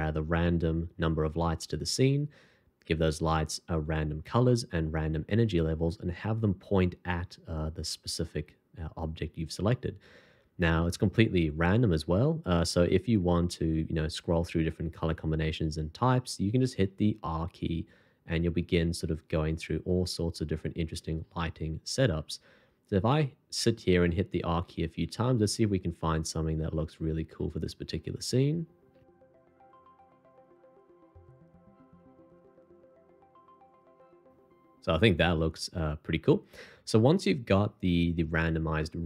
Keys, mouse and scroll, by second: 17.6-33.5 typing.